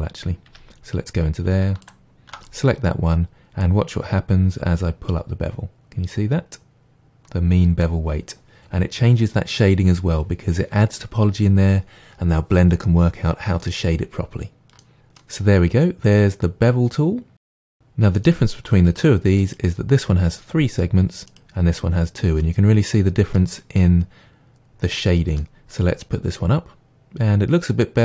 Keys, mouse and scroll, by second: 0.5 Tab, 1.8 alt+click, 3.6-13.6 drag, 13.6-17.8 middle drag, 15.0 scroll down 1, 17.8 click, 18.3 click, 18.9 click, 19.4 click, 21.3 click, 22.4-27.1 middle drag, 27.1 click, 27.8-28.0 middle drag.